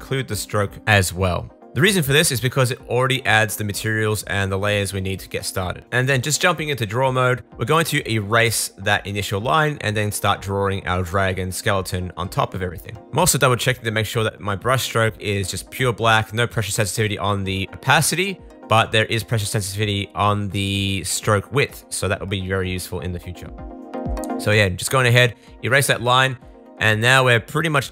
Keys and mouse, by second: 8.9 super+z, 10.7 click, 13.2 super+z, 16.6 super+z.